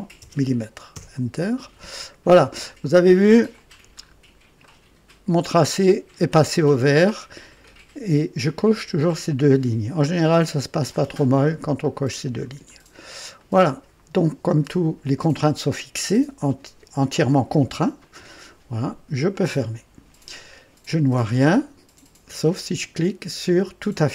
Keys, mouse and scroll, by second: 0.9 Return, 2.1-2.5 scroll down 1, 2.6 right click, 3.5 click, 4.0 scroll up 1, 4.6 right click, 12.6-13.0 scroll down 1, 13.3-14.0 right drag, 19.1 click, 23.9 click.